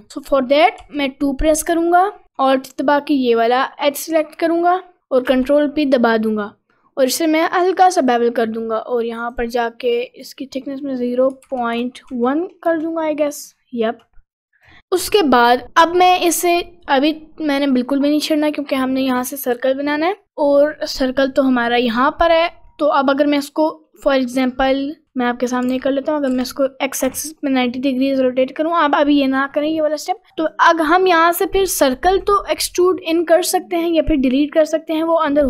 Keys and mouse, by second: 0.8 2, 5.3 ctrl+b, 11.0-12.7 drag, 20.6 middle click, 22.7 middle click, 25.0 a, 25.7 r, 26.3 r, 27.7 middle click, 29.7 middle click, 30.1 middle click, 30.5 click, 31.2 click, 31.9 3, 32.2 click, 33.0 click, 34.1 middle click.